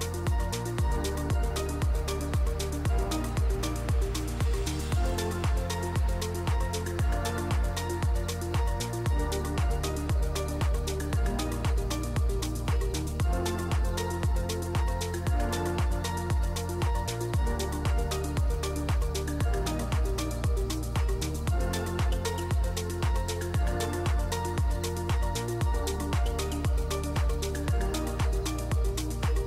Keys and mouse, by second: 1.1 click, 1.8 0, 2.8 g, 4.2 g, 7.2 g, 8.5 g, 12.8 click, 14.8-17.2 shift+drag, 19.6 shift+a, 20.9 shift+click, 21.4 shift+a, 23.5 KP_Decimal, 24.6 middle click, 24.9 Tab, 25.2 g, 26.1 Tab, 26.4 s, 28.3 ctrl+a, 28.8 Tab, 29.0 click, 29.3 s.